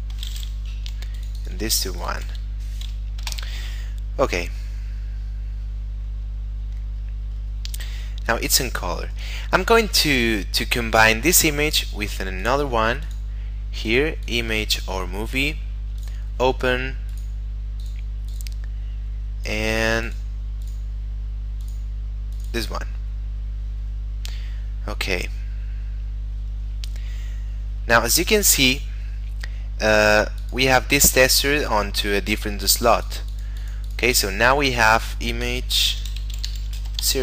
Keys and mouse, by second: 0.9 1, 1.1 click, 1.6 1, 1.9 click, 2.2 1, 3.2 Return, 11.6 click, 25.3 middle click, 28.3 click, 32.7 click, 36.1-37.0 typing.